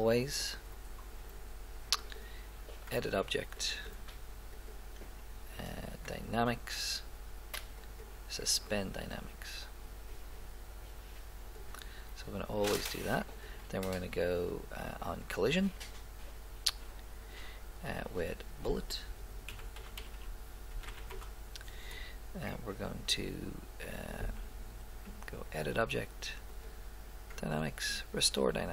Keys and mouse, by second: 2.1-3.9 drag, 4.5-6.4 drag, 10.1 click, 18.3-20.0 drag, 20.2 l, 24.0-25.7 drag, 26.5-28.3 drag.